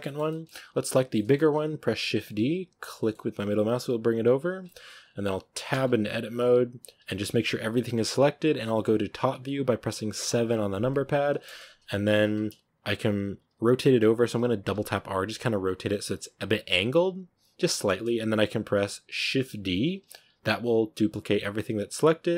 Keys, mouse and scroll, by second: 0.8 right drag, 1.0-2.2 middle drag, 2.2 shift+d, 4.5-4.9 shift+middle drag, 4.9 scroll up 3, 5.6 Tab, 6.9 a, 7.2 a, 10.1 KP_7, 11.3 shift+middle click, 12.0 scroll up 1, 14.5 r, 15.7 g, 17.0 g, 19.8 shift+d.